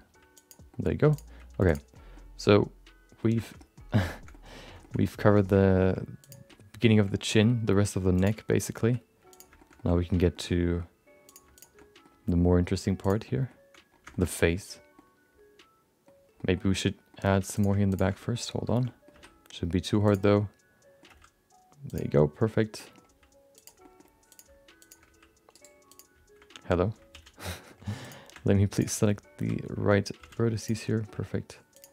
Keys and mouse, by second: 0.0 g, 0.7 middle click, 1.1 click, 1.4 g, 2.2-3.2 middle drag, 3.6 middle click, 4.3 middle click, 5.0 middle click, 5.6 middle click, 6.2 click, 6.5 middle click, 6.9 shift+middle click, 7.1 middle click, 7.4 g, 8.6 middle click, 8.8 r, 9.6 shift+middle click, 9.9 middle click, 10.5 middle click, 11.2 click, 11.5 shift+click, 11.7 middle click, 12.1 g, 13.2 middle click, 14.3 middle click, 15.0-16.0 middle drag, 16.4 middle click, 17.2 middle click, 17.5 click, 17.9 ctrl+shift+click, 18.3 middle click, 18.9 middle click, 19.1 e, 20.3 middle click, 21.0 g, 22.2 middle click, 22.9 middle click, 23.1 g, 23.9 middle click, 24.3 click, 24.8 shift+click, 25.1 g, 25.9 click, 27.1 alt+z, 27.3 middle click, 28.0 click, 28.7 shift+click, 29.3 alt+z, 30.2 f, 30.6 click, 30.8 middle click, 31.1 g.